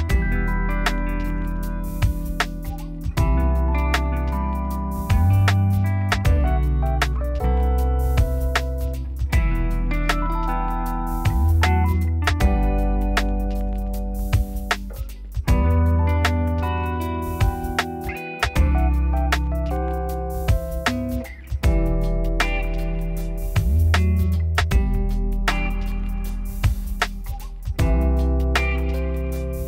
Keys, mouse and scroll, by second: 0.0 click, 0.5 z, 1.0 g, 2.8 o, 3.3 g, 4.6 middle click, 4.8-5.8 scroll down 3, 5.8 click, 6.6 Tab, 6.8 z, 7.4 g, 8.2 Tab, 8.4 z, 8.5 middle click, 8.8 scroll up 1, 9.0 shift+middle click, 9.1 Tab, 9.4 Tab, 9.6 scroll down 3, 9.7 shift+middle click, 9.8-10.5 scroll up 4, 10.2 click, 10.3 shift+middle click, 10.5 Tab, 10.7 z, 11.3 g, 12.6 g, 13.4 z, 13.5 middle click, 13.7 Tab, 13.8 scroll down 7, 14.1 shift+middle click, 14.4-14.9 scroll up 2, 14.5 shift+middle click, 14.9 shift+middle click, 15.3 click, 15.6 Tab, 15.8 click, 16.1 z, 16.4 click, 16.6 z, 16.8 middle click, 17.3 g, 18.3 s, 19.4 Tab, 19.7 shift+middle click, 20.1 s, 20.6 z, 20.9 Tab, 21.6 g, 22.3 Tab, 22.6 z, 22.6 middle click, 23.1 scroll up 1, 23.3 shift+middle click, 24.2 Tab, 24.7 middle click, 25.3 g, 26.3 Tab, 26.4 scroll down 2, 26.5 middle click, 26.8 scroll up 2, 27.1 middle click, 27.3 scroll up 1, 27.5 shift+middle click, 28.3 ctrl+z, 28.5 ctrl+z, 28.7-29.2 scroll up 2, 29.2 g.